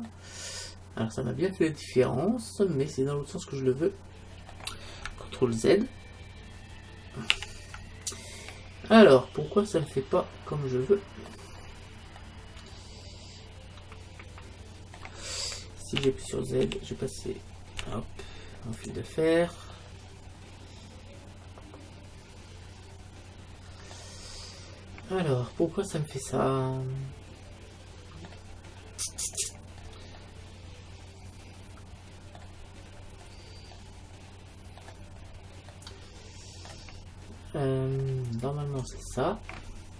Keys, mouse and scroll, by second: 0.6-1.9 middle drag, 7.4 ctrl+z, 8.2 middle click, 9.0 middle click, 9.9-14.2 middle drag, 14.3 middle click, 16.0 z, 16.7 z, 17.8 z, 19.3-21.5 middle drag, 24.3-28.1 middle drag, 28.6-32.0 middle drag, 29.8 scroll down 1, 32.8-35.5 middle drag, 35.5 scroll up 1, 35.7-38.8 middle drag, 38.8-39.9 right drag.